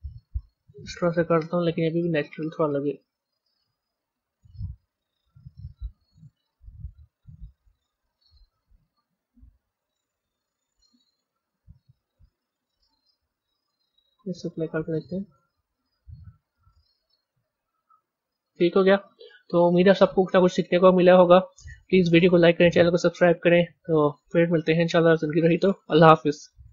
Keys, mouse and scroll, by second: 1.4 b, 3.3 Tab, 5.1 click, 5.5-8.3 middle drag, 8.3 scroll up 3, 9.5 KP_1, 10.6-11.6 shift+middle drag, 11.6-12.6 scroll up 2, 13.7 click, 17.1 click, 18.5-19.8 drag, 21.4-24.4 middle drag.